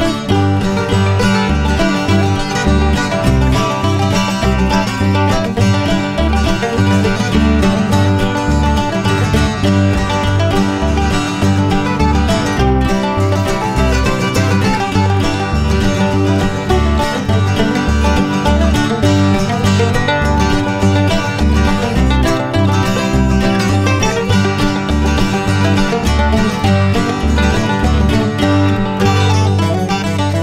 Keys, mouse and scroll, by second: 1.4 click, 3.1 click, 10.3 click, 12.1 click, 13.9 click, 17.2 click, 17.8-20.5 typing, 18.2 click, 18.5 click, 18.7 click, 19.2 click, 19.6 click, 19.9 click, 20.1 click, 21.7 click, 23.5 click, 24.5 click, 26.5 click, 29.0 click.